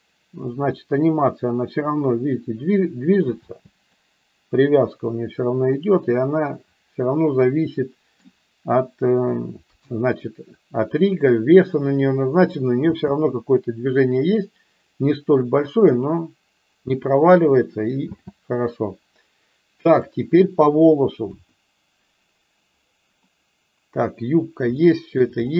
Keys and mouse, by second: 3.6 space, 3.9-5.6 middle drag, 5.7-8.2 middle drag, 9.6 KP_1, 12.8 space, 18.3 space, 21.3 KP_1, 24.7-25.2 shift+middle drag.